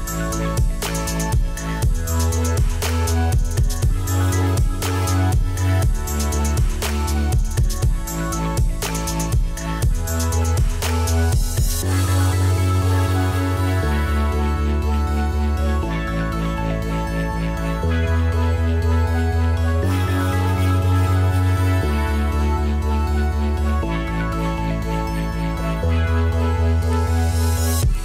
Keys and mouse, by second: 1.1 click, 2.4 x, 2.7 Return, 3.8 click, 4.9 click, 10.4 click, 11.5 right click, 12.3 click, 13.6 click, 15.7 click, 17.0 click, 18.0 click, 18.3 Escape, 18.4 click, 21.0 ctrl+e, 21.1 click, 22.4 click, 23.6 Escape, 24.1 click, 24.9 click, 25.7 click, 26.2 Delete, 26.6 a, 26.7 click.